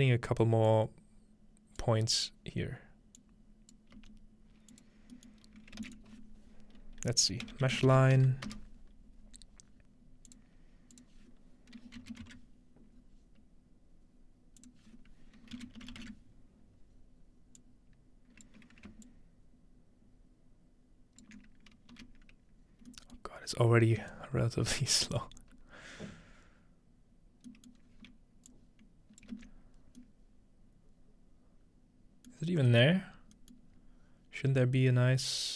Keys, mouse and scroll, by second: 0.7-3.0 drag, 2.0-2.9 scroll down 2, 2.9-3.2 scroll down 1, 3.2-3.8 drag, 4.0 g, 4.8 click, 4.9 scroll down 1, 5.6 scroll up 1, 5.8 typing, 7.5-8.4 typing, 10.3 click, 10.6 scroll up 2, 10.9 click, 12.3 -, 14.6 click, 17.6 click, 19.1-21.3 ctrl+shift+drag, 21.9 x, 24.1-24.8 ctrl+shift+right drag, 26.1-26.7 scroll down 1, 27.8 middle click, 27.9-28.5 scroll down 2, 28.5 click, 29.3 ctrl+space, 30.0-31.0 middle drag, 32.5 middle click, 32.9 middle click, 33.0-34.5 scroll up 1, 33.6 middle click, 34.5-34.8 scroll down 1.